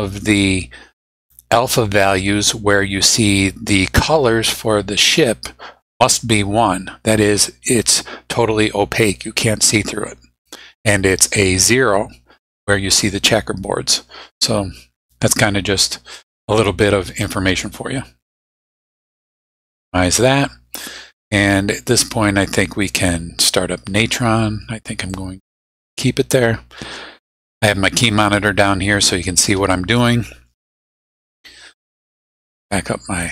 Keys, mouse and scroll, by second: 19.0 click, 25.1-25.9 drag, 26.3 click, 32.4 click.